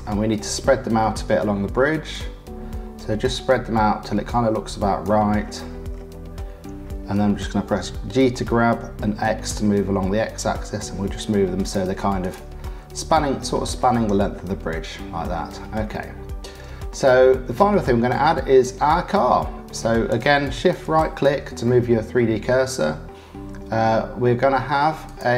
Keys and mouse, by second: 2.1-5.0 drag, 8.1 g, 12.2 click, 12.6 click, 14.5 click, 14.7 middle click, 15.1 click, 15.9 click, 16.2 middle click, 17.6 middle click, 20.8 shift+middle click, 21.6 middle click, 21.8 click, 25.0 click.